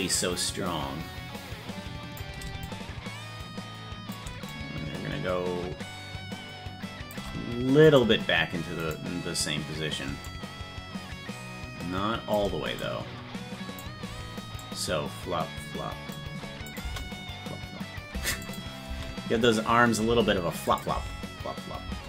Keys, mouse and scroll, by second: 2.6-4.1 drag, 4.5-7.1 shift+drag, 7.9-9.5 right drag, 10.2-12.3 shift+drag, 12.7-13.8 drag, 14.6-16.1 drag, 16.7 click, 18.4 click, 18.8 space, 20.6 click, 20.9 space.